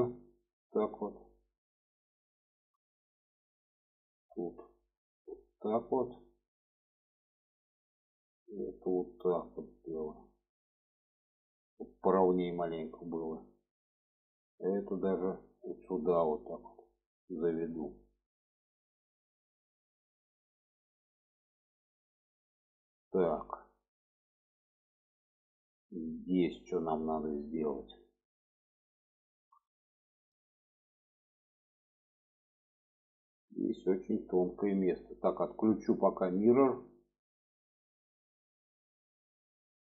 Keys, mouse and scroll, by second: 2.4 shift+middle click, 3.6 click, 5.1-7.4 drag, 8.0 click, 9.0-12.1 drag, 12.8 shift+middle click, 13.5 shift+middle click, 14.2-14.8 drag, 15.6-17.2 drag, 17.6 click, 18.3 shift+middle click, 19.2 click, 20.2-22.0 drag, 22.4 click, 23.1 alt+z, 23.5 middle click, 24.6 middle click, 25.4 middle click, 26.6-27.5 middle drag, 27.7 middle click, 28.7-29.9 middle drag, 30.6 shift+middle click, 31.7-34.4 middle drag, 37.3 drag, 37.9 middle click, 38.7-39.0 shift+middle drag, 39.7 middle click.